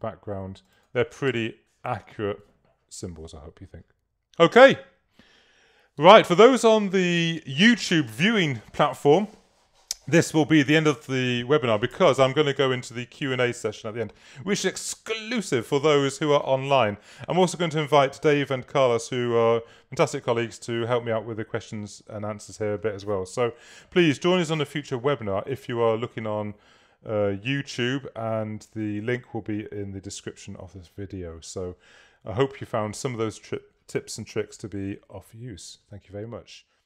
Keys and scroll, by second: 1.3 space.